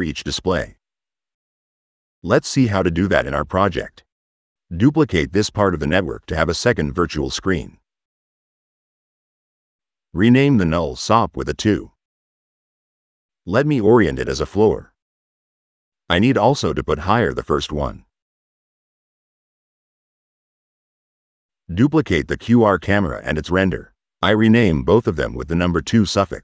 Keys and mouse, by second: 1.7 s, 4.9 right click, 6.7 click, 6.9 v, 7.6 click, 9.1 click, 10.1 click, 12.5 click, 13.4 middle click, 14.2 click, 14.4 right click, 15.0 middle click, 17.1 click, 18.0-19.1 middle drag, 19.4 click, 19.8 right click, 20.4 right click, 20.8 right click, 22.6 right click, 23.4 ctrl+c, 23.8 v, 24.0 right drag, 24.2 click, 25.9 click.